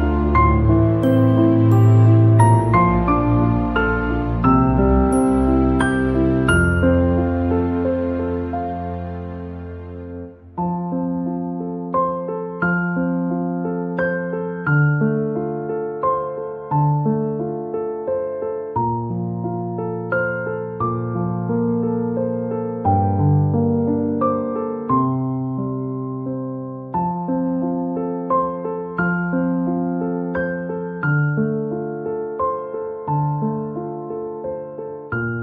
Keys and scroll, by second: 11.0-15.1 typing, 12.2 Caps_Lock, 16.2 BackSpace, 16.4 Caps_Lock, 19.3-23.9 typing, 25.3-27.4 typing, 31.6 BackSpace, 35.0-35.4 typing.